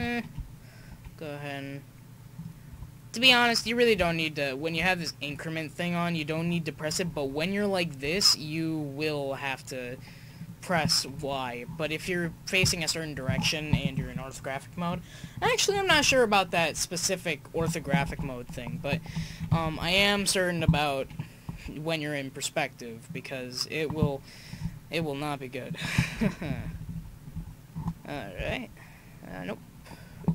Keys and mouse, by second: 0.9 r, 3.2-3.7 right drag, 4.2-4.9 drag, 4.9 right click, 5.2-5.6 middle drag, 5.6-7.4 right drag, 8.0 r, 11.1 KP_1, 15.9 Up, 16.1-16.7 Left, 18.1 i, 19.3 Right, 19.5 Right, 19.6 Right, 19.8 Right, 20.0 Right, 21.5 r, 25.6 click, 26.4 Left, 26.6 Left, 26.8 Left, 26.9 Left, 27.3 Left, 28.4 r.